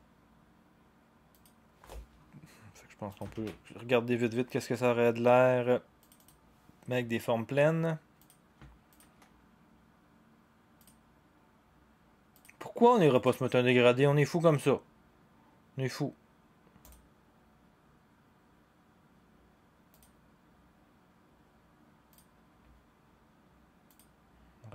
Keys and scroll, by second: 3.3 ctrl+d.